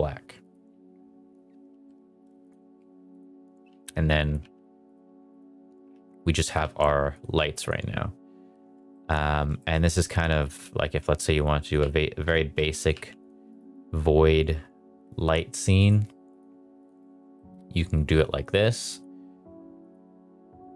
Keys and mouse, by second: 0.4 click, 1.6 r, 2.4 click, 3.1 click, 3.6 r, 4.2 click, 4.3 g, 4.8 click, 5.0 r, 5.9 alt+d, 6.5 r, 7.3 g, 7.6 click, 8.9 middle drag, 9.5 shift+middle drag, 10.4 alt+d, 10.7-13.4 typing, 11.6 click, 12.2 click, 12.8 click, 13.2 click, 15.8-16.3 drag, 16.7 click, 17.3 shift+middle drag, 18.9 click, 19.8 click.